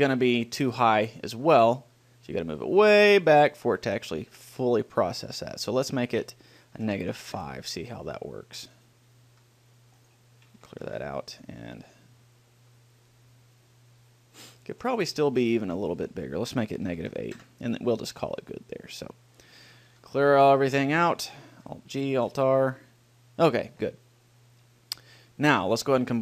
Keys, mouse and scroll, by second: 2.6-3.8 drag, 4.8-7.6 right drag, 6.0-8.3 drag, 9.0 right click, 9.6 g, 11.2 alt+g, 11.9 middle click, 12.4-13.6 drag, 15.3 right click, 17.5 click, 19.2-20.9 right drag, 20.2 alt+g, 20.9 a, 21.2 a, 21.8 alt+g, 22.5 alt+r.